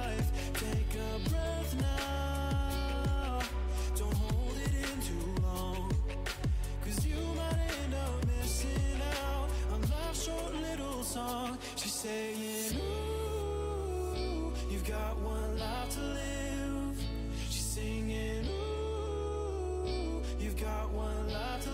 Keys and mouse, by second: 0.1 Tab, 1.1 z, 1.5 a, 4.4 z, 5.0 click, 6.7 Tab, 12.1 Tab, 12.7 Tab, 13.5 Tab, 16.3 ctrl+r, 20.4-21.5 drag, 21.5 z.